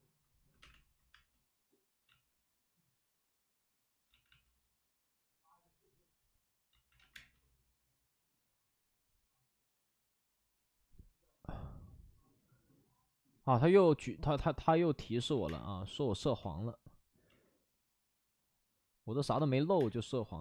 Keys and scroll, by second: 0.4 5, 0.5 space, 2.0 ctrl+z, 4.2 ctrl+z, 6.7 ctrl+z, 6.9 ctrl+z, 7.1 space, 13.5 ctrl+z, 15.1 ctrl+z, 15.3 ctrl+z, 15.4 space, 16.3 ctrl+z, 17.2 ctrl+z, 19.3 space, 19.6 1.